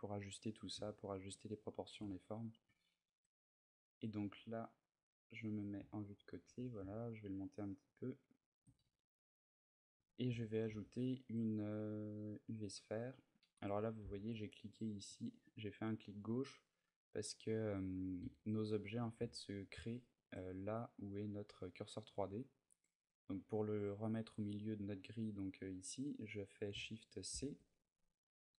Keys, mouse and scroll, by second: 0.7 shift+middle click, 2.0 ctrl+middle click, 2.7 ctrl+middle click, 3.9 middle click, 4.7 KP_3, 5.7 shift+middle click, 6.2 g, 8.3 shift+click, 8.6 a, 9.8 click, 10.4 shift+a, 14.9 click, 15.3 click, 16.9 middle click, 18.2 shift+middle click, 19.1 ctrl+middle click, 20.2 ctrl+middle click, 23.4 middle click, 27.1 shift+c, 27.8 middle click.